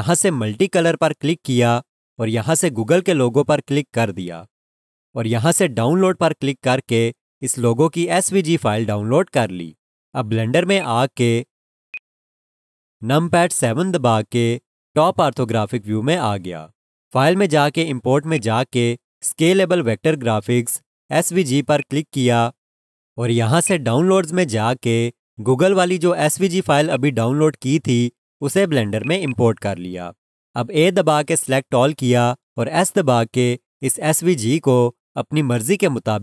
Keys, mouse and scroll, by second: 1.6 click, 10.8 click, 18.3 click, 21.8 click, 26.9 click, 29.2 double click, 32.8 s.